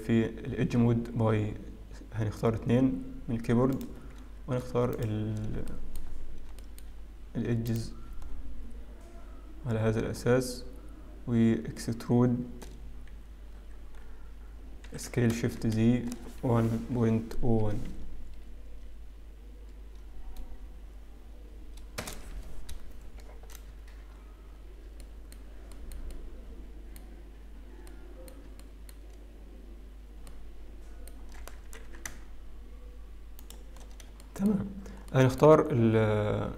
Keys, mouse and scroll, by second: 1.7 2, 3.9 click, 5.2 alt+shift+click, 5.8 shift+middle click, 6.9 shift+middle click, 6.9-7.5 scroll up 3, 7.5-7.9 scroll up 1, 8.0 shift+click, 8.5-10.1 scroll down 4, 10.1-11.2 scroll up 4, 13.7-15.3 scroll down 5, 15.3-17.2 scroll down 1, 15.3 e, 25.1-25.8 scroll up 6, 25.8 shift+middle click, 26.2 shift+middle click, 26.5 middle click, 28.2 middle click, 28.8 shift+middle click, 29.3-30.4 scroll up 2, 30.4 middle click, 32.3 shift+s, 34.0 scroll down 4, 34.5 shift+middle click, 34.9 scroll up 1, 35.2 shift+middle click.